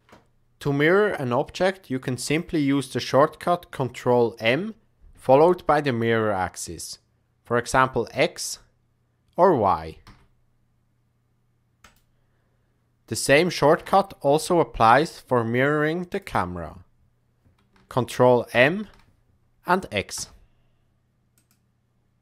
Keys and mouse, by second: 2.2 click, 4.3 ctrl+m, 13.7 KP_0, 18.4 ctrl+m.